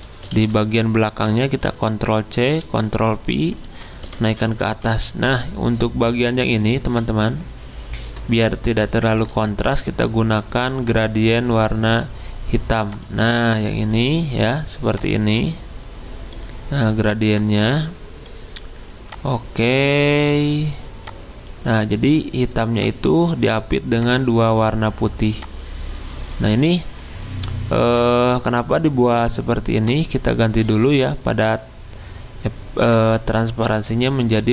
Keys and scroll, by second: 0.3 ctrl+z, 1.6 ctrl+c, 2.6 ctrl+f, 4.3 ctrl+shift+], 14.4 g.